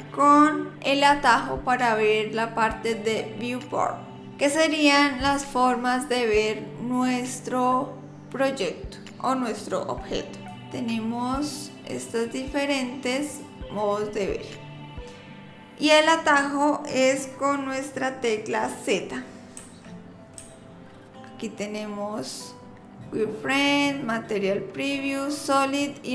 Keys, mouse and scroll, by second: 10.6 click, 11.9 click, 13.3 click, 19.6 z, 20.4 z.